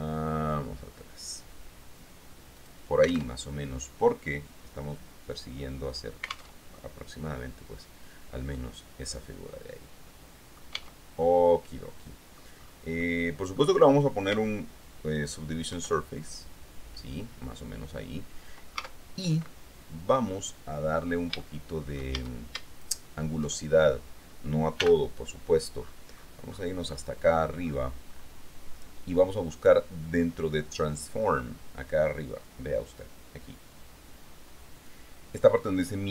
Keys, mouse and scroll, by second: 2.8 click, 3.6 alt+Tab, 6.8 alt+Tab, 8.7-11.0 drag, 11.0 Tab, 11.4-12.7 drag, 13.2 click, 15.9 ctrl+2, 19.0 Tab, 21.6 shift+click, 22.3 shift+a, 23.0 alt+shift+click, 25.0 n, 26.0-27.3 scroll up 1, 27.3-28.6 scroll up 1, 28.6-29.2 scroll up 1.